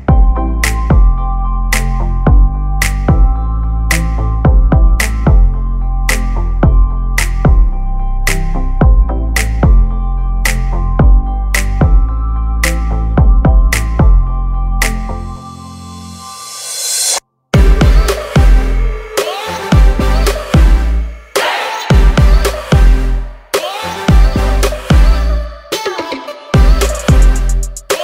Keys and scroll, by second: 6.5 space, 7.3 Delete, 8.1 l, 9.6 space, 17.4 Escape, 22.9-26.6 typing.